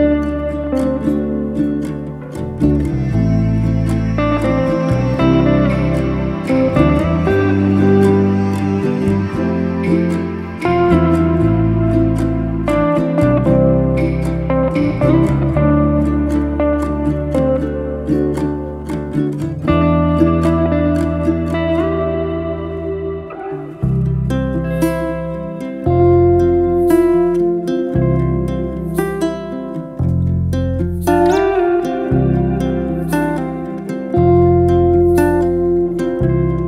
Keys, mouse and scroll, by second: 0.1 click, 0.4 click, 0.6-1.1 right drag, 1.1-2.6 middle drag, 2.7 click, 3.0-4.4 middle drag, 4.5 click, 4.9-6.2 right drag, 6.2 click, 6.5 click, 6.7-8.2 middle drag, 8.4 scroll down 1, 8.7-9.2 middle drag, 9.2-9.6 scroll up 1, 9.6 scroll down 1, 9.8-10.4 shift+middle drag, 10.4 click, 10.7-11.7 right drag, 11.7 click, 12.2 click, 12.4-13.8 right drag, 13.8 click, 13.9 drag, 14.7-15.0 middle drag, 15.0-15.4 scroll up 2, 15.4-16.1 shift+middle drag, 16.1 click, 16.4 Tab, 16.7 shift+middle click, 17.2 3, 17.2 click, 17.5-18.6 shift+middle drag, 18.6 shift+s, 19.5-20.7 shift+middle drag, 20.7 shift+a, 22.2 Tab, 22.6 shift+a, 24.2-24.9 shift+middle drag, 24.9 Tab, 25.9 s, 28.9-31.5 middle drag, 31.5 e, 35.3-36.1 middle drag, 36.1 e.